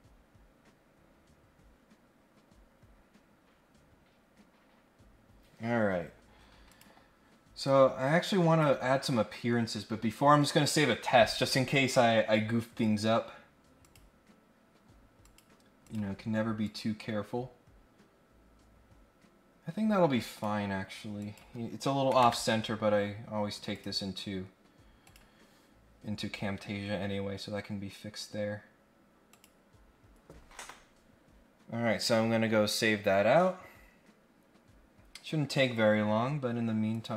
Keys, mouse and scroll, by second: 6.6 click, 7.6 click, 13.8 click, 15.2 click, 15.8 click, 16.6-20.4 drag, 21.2 click, 23.7 click, 25.0 click, 29.3 click, 36.9 click.